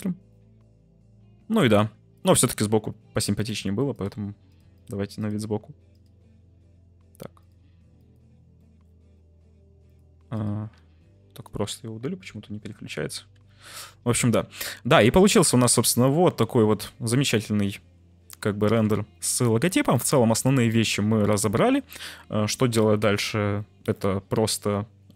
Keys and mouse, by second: 1.6 g, 1.7 z, 3.3-3.6 drag, 3.9 click, 5.2 click, 7.4 click, 8.6 middle click, 9.9 click, 10.3 click, 12.2 Delete, 13.1 `, 18.5 click, 19.9 click, 22.7 click.